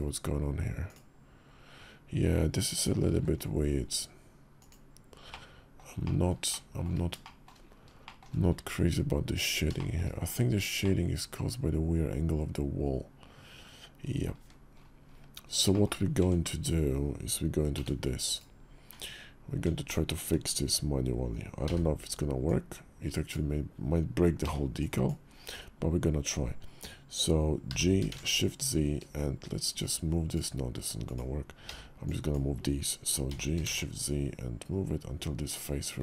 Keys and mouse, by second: 2.9 alt+v, 5.1-5.5 middle drag, 5.8 shift+middle click, 6.2 shift+middle click, 7.0 shift+drag, 7.2 shift+middle click, 7.8 shift+middle click, 9.0 Tab, 9.5 shift+drag, 10.0 click, 10.6-13.7 drag, 13.7 middle click, 14.2 `, 15.5 shift+click, 16.0 Tab, 17.5 b, 18.7 Tab, 21.4 b, 24.2 b, 27.5 g, 30.8 click, 31.4 b, 33.0 g.